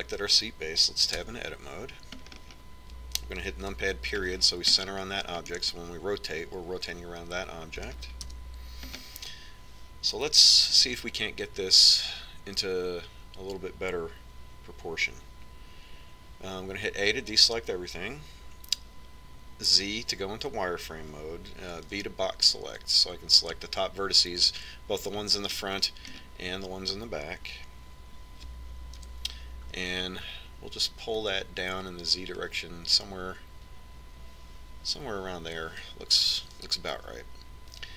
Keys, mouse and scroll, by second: 2.8 Tab, 3.9-6.4 middle drag, 5.3 KP_Decimal, 7.9-9.1 middle drag, 9.9 KP_1, 10.6-14.5 middle drag, 18.7 a, 21.5 z, 23.6 b, 27.3-29.0 middle drag, 30.8 KP_1, 33.1-35.0 drag.